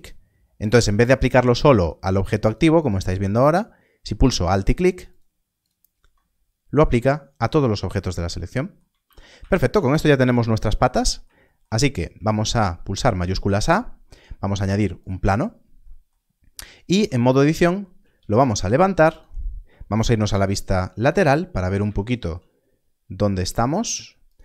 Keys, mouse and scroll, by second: 5.0 alt+click, 9.0 alt+a, 13.1 shift+a, 16.9 Tab, 18.2 z, 19.1 click, 20.1 3, 21.2-21.5 scroll up 1, 22.7 scroll up 1, 23.3 g, 23.4 z, 24.2 shift+click.